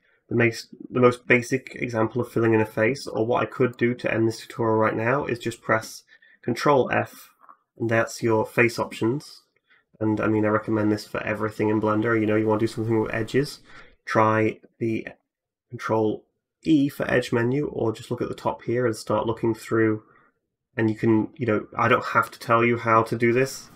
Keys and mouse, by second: 0.7 Tab, 2.7 a, 2.8 a, 3.5 alt+click, 6.6 ctrl+f, 6.9-23.7 middle drag, 15.0 ctrl+e.